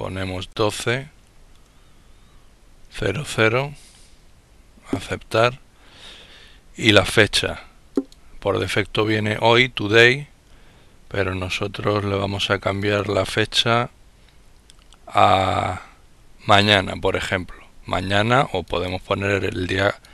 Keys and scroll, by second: 0.0-1.3 typing, 2.6 typing.